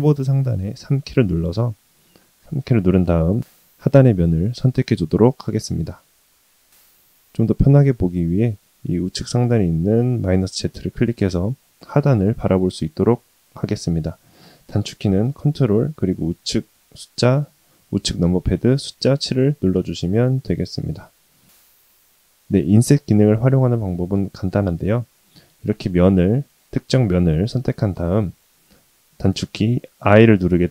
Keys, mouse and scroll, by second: 2.3 3, 3.4 click, 5.4-6.7 middle drag, 10.5 click, 13.8 middle click, 18.8 ctrl+KP_7, 21.8 ctrl+z, 23.6 click, 24.5 click, 27.7 i.